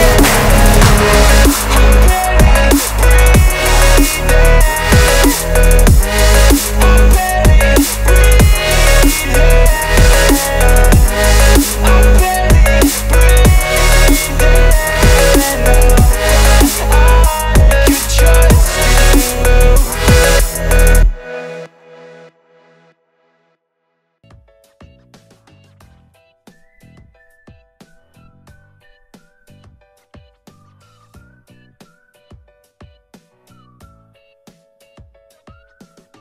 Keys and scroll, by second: 7.3 Escape, 8.6 Delete, 14.0 Delete, 20.1 Escape.